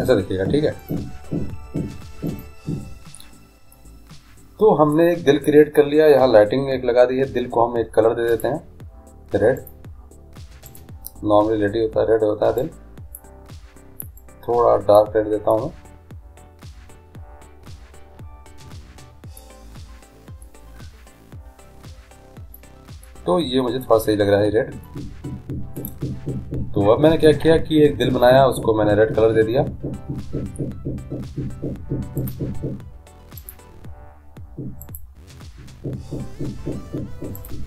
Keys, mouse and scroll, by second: 1.0-3.0 drag, 3.9-5.7 middle drag, 8.5-11.7 drag, 15.7-17.5 middle drag, 19.8-20.6 scroll up 1, 20.6 middle click, 25.6-26.8 middle drag, 32.4-34.1 drag, 37.5-37.6 drag.